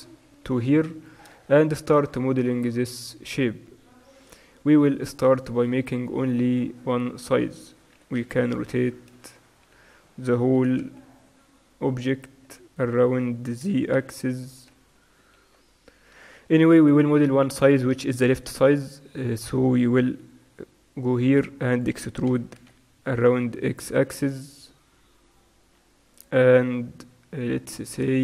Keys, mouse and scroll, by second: 0.4 z, 0.5-3.1 drag, 3.1-4.2 middle drag, 5.3-6.5 middle drag, 6.4 a, 6.5 a, 8.0 r, 9.8 Tab, 10.7 r, 13.8 r, 16.9 Tab, 17.5-21.9 right drag, 21.9-26.1 drag, 22.3 e.